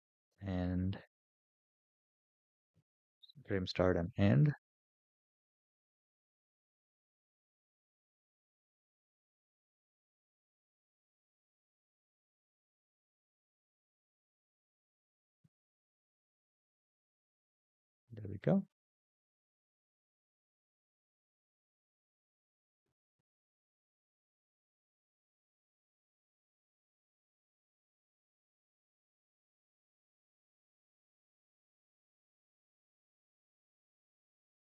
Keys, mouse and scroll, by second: 0.3-0.9 middle drag, 1.9 click, 7.7 click, 9.3 click, 11.3 space, 13.5 space, 15.2-15.6 scroll up 8, 16.5-17.2 scroll down 3, 17.2-19.0 middle drag, 21.9 click, 23.8 scroll up 3, 24.9 scroll down 3, 25.8-28.4 middle drag, 29.6 click, 32.7 middle click, 33.6 scroll up 4.